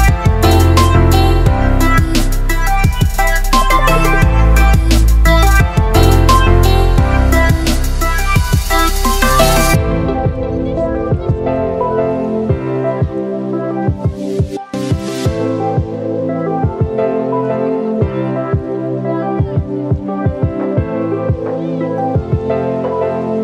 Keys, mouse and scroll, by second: 6.4-7.0 ctrl+alt+scroll up 3, 8.6-9.2 click, 12.6 click, 13.8-14.3 ctrl+alt+scroll down 2, 15.3-15.8 ctrl+alt+scroll down 1, 15.8 ctrl+alt+scroll up 1, 17.6-22.3 drag.